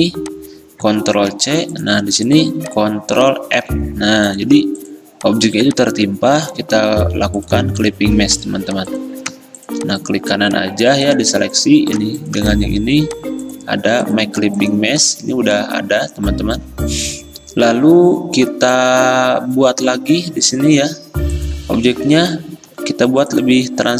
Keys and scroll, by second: 1.2 ctrl+c, 3.7 ctrl+f, 6.4 d.